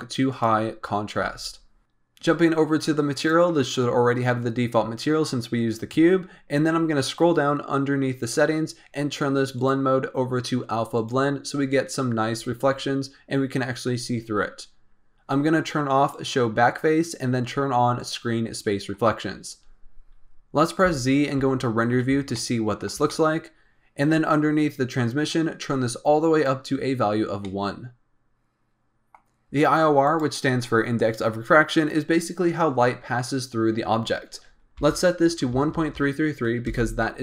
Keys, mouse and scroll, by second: 3.1 click, 6.1-8.2 scroll down 14, 8.2 click, 8.6-9.5 scroll down 2, 9.5-12.5 drag, 14.8-16.1 scroll down 4, 16.1 click, 17.9 click, 19.8-20.8 scroll up 2, 20.8 z, 22.3-24.1 shift+middle drag, 24.1-25.6 scroll up 2, 25.6-27.4 drag, 27.4-30.0 middle drag, 30.0-33.0 drag, 35.7 KP_3.